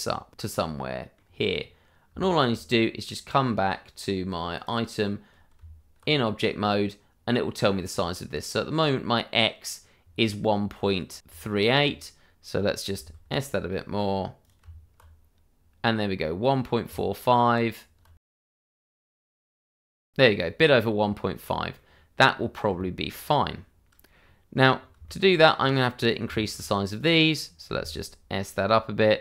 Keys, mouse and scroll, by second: 0.5 click, 0.6-0.9 scroll down 1, 1.2 middle click, 2.2 shift+middle click, 4.5 click, 5.5 Tab, 8.9 middle click, 11.3 Tab, 14.4 click, 14.6 Tab, 16.8 Tab, 19.3 click, 19.5 Tab, 20.0 scroll down 1, 20.4 middle click, 22.3 scroll up 1, 22.7 shift+middle click, 23.1 scroll up 1, 24.7 scroll down 1, 25.0 shift+middle click, 25.5-26.0 scroll up 1, 26.0 click, 26.3 shift+middle click, 26.5-27.6 shift+scroll up 1, 27.7 s.